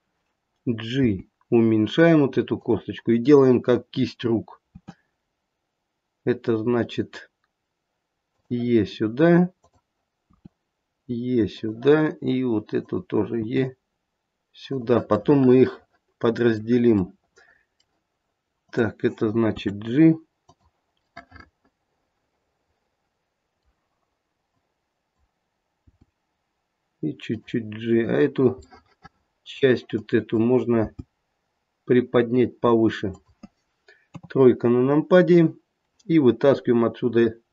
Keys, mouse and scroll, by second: 1.0 g, 4.7 e, 9.6 click, 10.2 e, 13.2 click, 15.2 middle click, 15.2 e, 17.2 middle click, 18.6 click, 19.4 g, 21.1 middle click, 24.4 click, 25.8 g, 28.6 middle click, 29.8 click, 30.8 g, 34.1 KP_3, 34.9-37.2 scroll up 1.